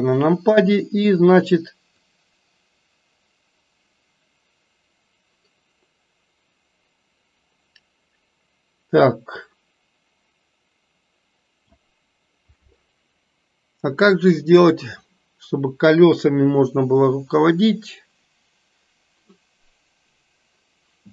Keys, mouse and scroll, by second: 2.1 click, 3.1-11.7 drag.